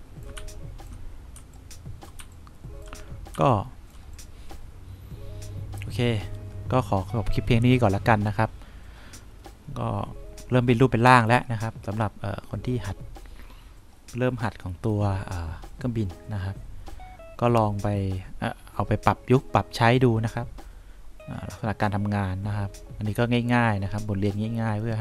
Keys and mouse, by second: 0.7 3, 1.7 2, 2.5 1, 3.7 3.